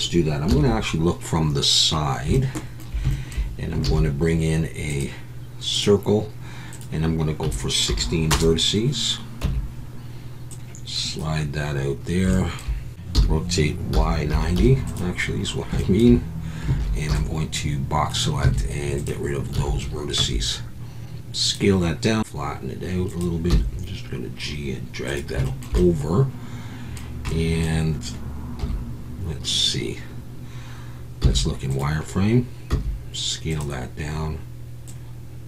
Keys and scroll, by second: 0.5 KP_3, 3.9 shift+a, 5.9 shift+a, 9.4 Tab, 12.9-14.5 typing, 16.8 alt+a, 17.1 b, 18.4 x, 19.5 a, 21.4 s, 22.2 y, 23.5 g, 28.6 KP_1, 31.2 z, 32.7 s.